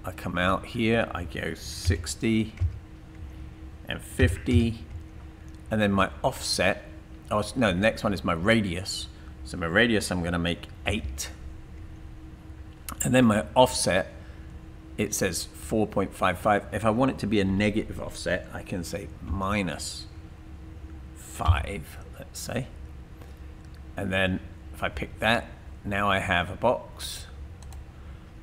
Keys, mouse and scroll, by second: 1.9-2.6 typing, 3.1 Tab, 3.9-4.7 typing, 4.9 Tab, 6.5-7.2 typing, 10.9-12.0 typing, 19.3 typing, 20.8-21.6 typing, 24.1 Tab, 25.5-26.9 typing.